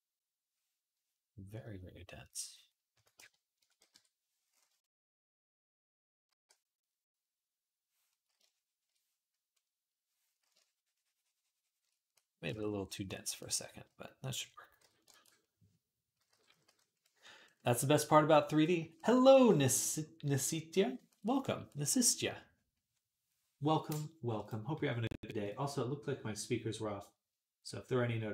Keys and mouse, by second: 7.1 ctrl+r, 14.6 ], 16.0 [, 16.1 [, 16.3 [, 16.5 [.